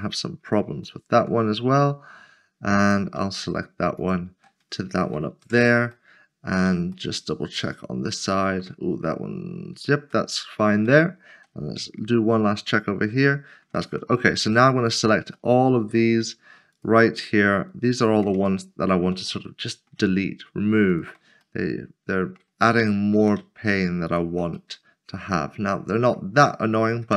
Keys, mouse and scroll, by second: 0.0 middle click, 1.0 shift+middle click, 2.8 click, 4.0 shift+click, 5.4 j, 5.9 middle click, 8.5 shift+middle click, 10.3 middle click, 10.8 shift+middle click, 11.6 scroll down 1, 13.2 shift+middle click, 14.3 2, 14.9 click, 15.5 middle click, 16.7 shift+click, 18.0 shift+click, 18.5 shift+middle click, 19.5 middle click, 20.9 shift+click, 21.6 middle click, 22.6 shift+middle click, 24.7 middle click.